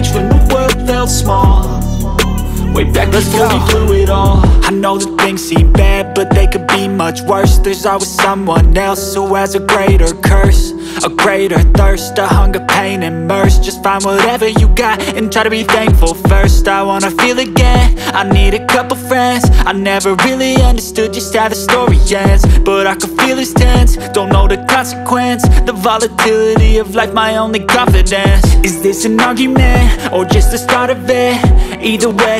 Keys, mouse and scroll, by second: 0.7 space, 1.2 click, 7.6 space, 7.8 click, 8.2 space, 8.6 click, 16.9 click, 25.0 space, 25.2 click, 25.6 scroll up 1, 28.9 space, 29.0 click, 29.8 click, 31.3 space, 31.4 click, 31.5 space, 32.0 click.